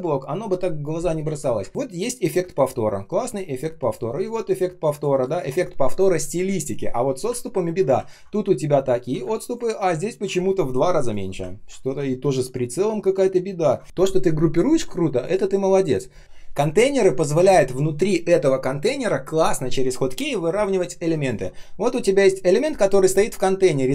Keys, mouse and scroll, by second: 1.2 ctrl+z, 1.5 space, 3.1 space, 3.6 space, 3.6 space, 7.4 ctrl+scroll up 1, 8.8-9.1 ctrl+scroll down 1, 9.1 space, 9.6 space, 9.8 ctrl+scroll up 1, 11.4-12.0 ctrl+scroll down 1, 12.0 ctrl+scroll up 1, 13.8 ctrl+z.